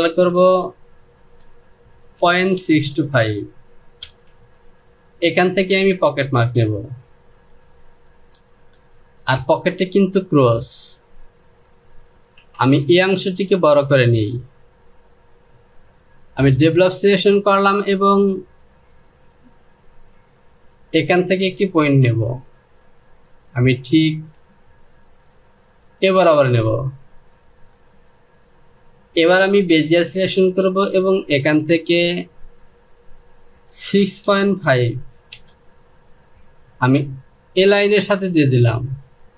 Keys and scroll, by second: 0.8 Down, 1.8 KP_Decimal, 2.2 KP_6, 2.6 KP_2, 2.8 KP_5, 3.7 Return, 12.1 Return, 34.3 KP_5, 34.9 Return.